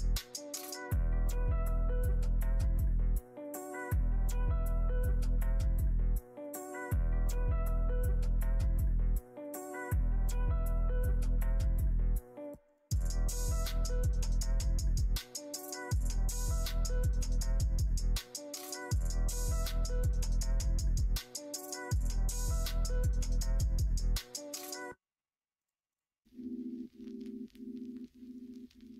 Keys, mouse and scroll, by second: 0.5 click, 1.2 click, 2.0 m, 4.5 click, 6.5 shift+click, 7.3 m, 10.1 click, 10.5 shift+click, 11.2 click, 11.7 shift+click, 12.2 shift+click, 13.6 middle click, 14.4 shift+middle click, 15.2 middle click, 16.2 shift+click, 17.0 m, 17.9 shift+middle click, 18.8 click, 19.2 click, 19.9 m, 20.6 middle click, 21.5 middle click, 23.2 click, 23.5 shift+click, 24.3 m, 25.6 click, 25.9 shift+click, 28.4 m.